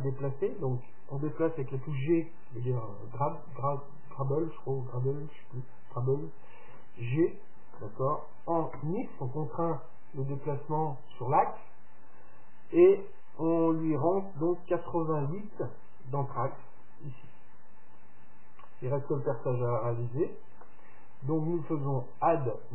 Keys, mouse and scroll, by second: 0.8 middle click, 6.8 g.